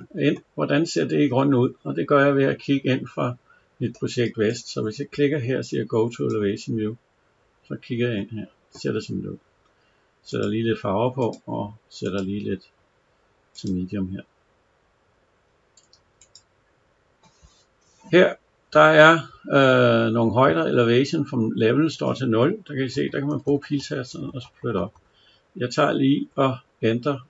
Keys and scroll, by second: 22.8 Up.